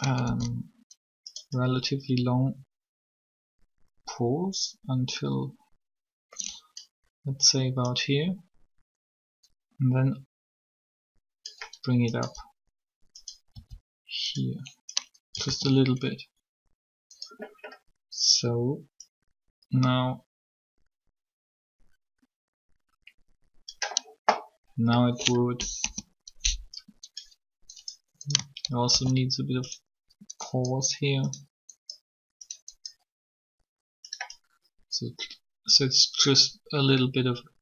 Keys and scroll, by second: 0.2 shift+d, 13.5 r, 15.4 alt+a, 25.6 3, 28.9 shift+d.